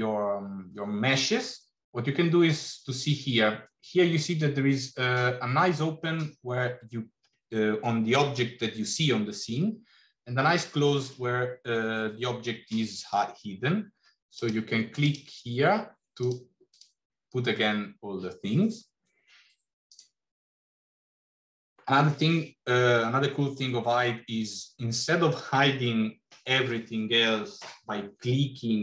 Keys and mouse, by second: 14.3 click, 14.9 click, 16.7 click.